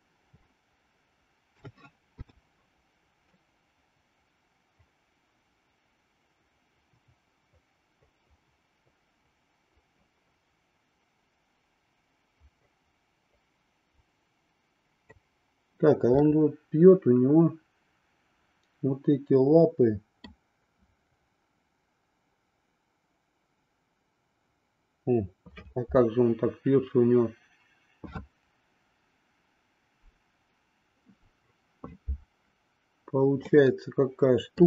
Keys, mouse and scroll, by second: 1.6 a, 2.2 i, 3.3-15.1 drag, 16.2-20.3 middle drag, 33.4-34.6 middle drag.